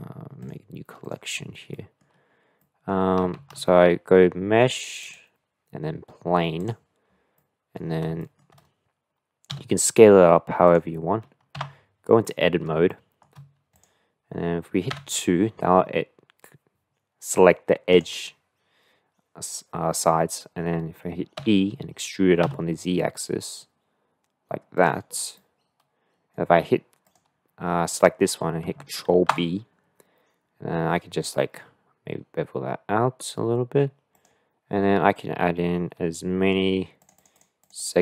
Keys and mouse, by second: 1.0 click, 1.7-2.0 middle drag, 2.6 middle click, 3.3 shift+a, 7.3-7.7 drag, 8.3 shift+click, 9.5 s, 11.6 Tab, 12.3 middle click, 12.8 shift+middle click, 14.9 2, 17.9 click, 21.4 e, 25.5 click, 25.6 middle click, 25.6 click, 29.2 ctrl+b, 37.0 click, 37.3 click, 37.6 click.